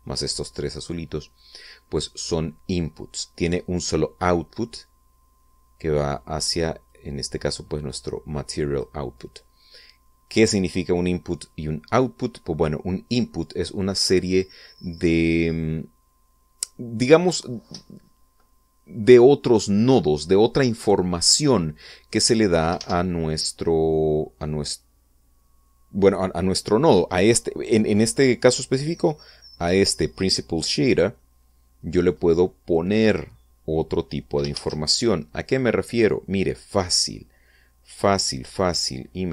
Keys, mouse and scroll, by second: 1.3 middle click, 7.4-9.5 drag, 23.3 shift+z, 29.6-30.1 middle drag, 31.2-31.5 scroll down 1, 31.7-32.8 middle drag, 35.1 shift+a.